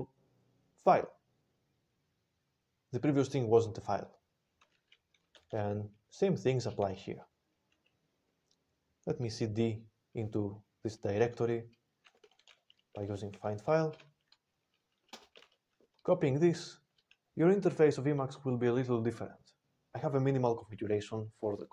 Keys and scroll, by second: 5.3 ctrl+n, 5.4 ctrl+n, 12.2 alt+x, 12.9-13.7 typing, 13.8 Return, 15.0 ctrl+space, 15.4 ctrl+a, 16.4 alt+w.